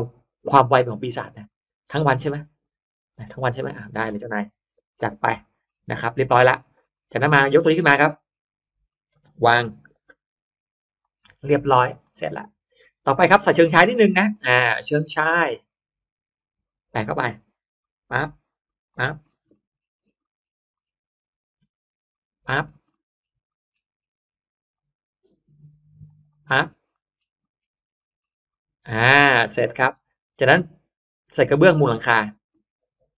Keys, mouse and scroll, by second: 0.2-0.6 scroll up 1, 1.4 middle click, 1.4-1.8 scroll up 1, 1.8 m, 2.5 click, 3.1 Up, 3.8 click, 4.2 middle click, 4.5 space, 4.8-5.2 middle drag, 5.3 click, 5.9 middle click, 6.5 middle click, 7.1-8.2 scroll up 3, 7.7 click, 8.0 middle click, 8.2 scroll down 1, 8.8 scroll up 1, 9.0 middle click, 9.0 m, 9.2 click, 9.9 Up, 10.8 click, 11.2 middle click, 11.2 space, 11.8 click, 12.1 middle click, 13.0 middle click, 15.0 click, 16.2 click, 16.9 middle click, 17.7 click, 18.6 click, 19.0-19.4 scroll down 1, 19.4 middle click, 19.4-20.2 scroll up 2, 20.1 middle click, 20.3-20.8 scroll down 1, 20.8 scroll up 1, 22.0 click, 22.4-22.8 scroll down 1, 22.8 middle click, 22.8-23.6 scroll up 2, 23.4 middle click, 24.0 scroll up 1, 24.6 click, 25.3-25.8 scroll up 1, 26.0 click, 26.3-26.7 scroll down 1, 26.8 middle click, 27.2-28.4 scroll up 2, 27.3 middle click, 28.4 middle click, 29.0-30.1 scroll down 1, 29.6 middle click, 30.3 scroll up 1.